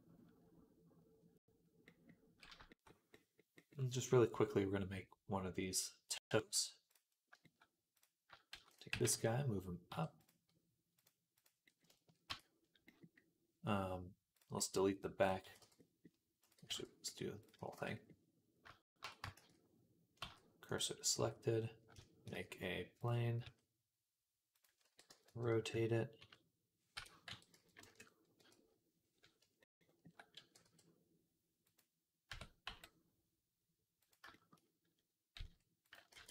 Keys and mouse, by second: 7.8 click, 8.4 shift+d, 8.7 g, 10.9-15.1 drag, 10.9 right click, 12.1 Tab, 15.1-16.2 middle drag, 15.3 x, 16.2 click, 16.3-21.8 middle drag, 16.4 x, 17.2 click, 18.5 x, 18.9 Tab, 20.0 shift+s, 21.0 Tab, 22.1 shift+a, 23.3 s, 24.7 r, 27.1 r, 28.2 KP_3, 31.2-34.4 middle drag, 31.2 e, 32.1 Tab, 32.5 g, 35.2 s, 36.0 ctrl+a.